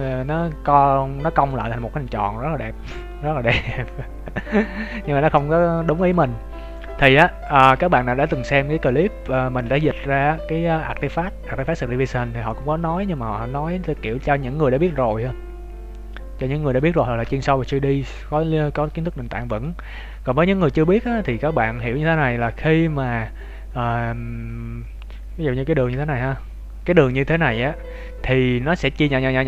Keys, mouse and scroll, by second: 1.5 middle click, 5.2-5.9 scroll up 1, 5.9 shift+middle click, 5.9-6.7 scroll up 1, 6.7 scroll up 1, 6.7 middle click, 7.1 z, 7.6 z, 7.9 Tab, 8.2 scroll down 3, 8.5 Tab, 17.3 middle click, 20.8 scroll up 2, 21.2-21.6 scroll down 1, 21.6 middle click, 21.6 scroll down 1, 23.9 scroll up 2, 24.7 scroll down 2, 25.9 KP_7, 26.3-27.2 scroll up 1.